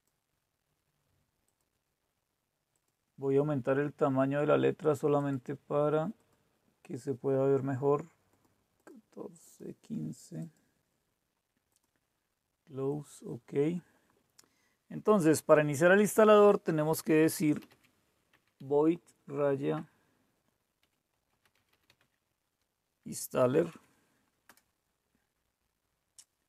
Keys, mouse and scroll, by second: 0.0 click, 1.4 click, 2.7 click, 5.2 click, 6.1 click, 8.3 click, 8.7 click, 9.4 click, 10.3 click, 11.0-14.4 drag, 17.4-24.9 typing.